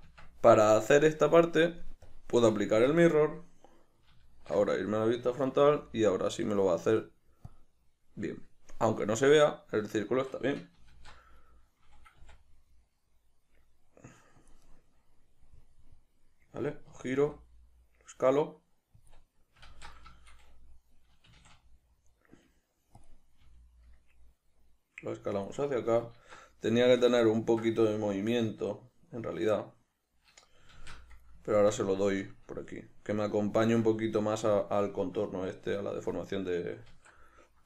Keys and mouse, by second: 2.1-9.2 drag, 4.5 alt+q, 9.2-14.5 middle drag, 10.9 alt+q, 14.5 click, 14.7-19.1 middle drag, 17.2 s, 19.1 click, 19.7 alt+q, 20.1-23.0 shift+middle drag, 21.3 s, 23.0 click, 23.4 g, 25.4 click, 26.1 alt+q, 26.8-37.6 shift+middle drag, 30.7 alt+q, 36.9 alt+q.